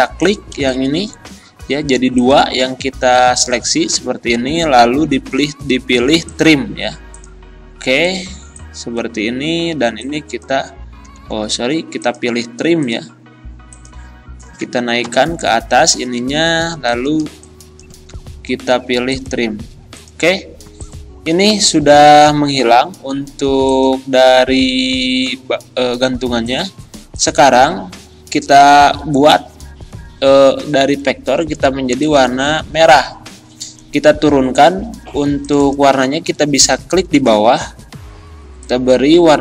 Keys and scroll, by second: 3.9 ctrl+z, 11.0 ctrl+z, 12.4 ctrl+z, 15.1 ctrl+Home, 18.1 ctrl+z, 21.5 Delete.